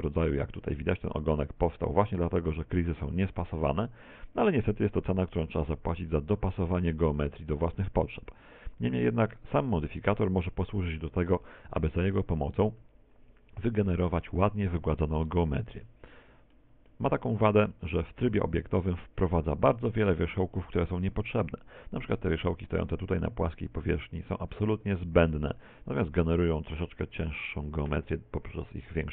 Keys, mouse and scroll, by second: 0.0 middle click, 0.6 scroll up 5, 4.6-5.4 scroll down 7, 5.4 middle click, 5.4 scroll down 2, 6.4 middle click, 7.2 middle click, 7.8 shift+middle click, 9.2 middle click, 9.9 scroll down 3, 10.4 shift+middle click, 14.4 Tab, 15.0 middle click, 16.1 middle click, 17.0 middle click, 17.9 Tab, 18.3 z, 18.8 scroll up 3, 21.4-21.8 scroll up 5, 23.2 middle click.